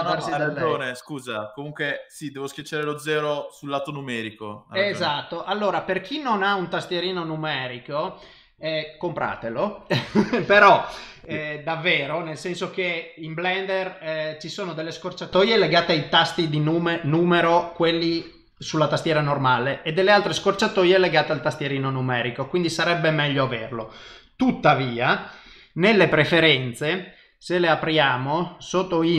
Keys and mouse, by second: 24.4 click.